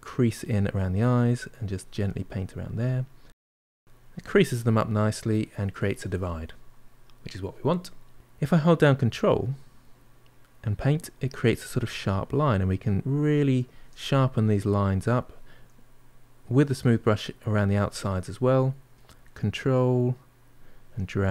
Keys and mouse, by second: 4.5-9.2 middle drag, 9.2-13.9 ctrl+drag, 13.9 middle click, 14.5-15.6 shift+drag, 15.6-16.7 middle drag, 16.7-21.3 shift+drag.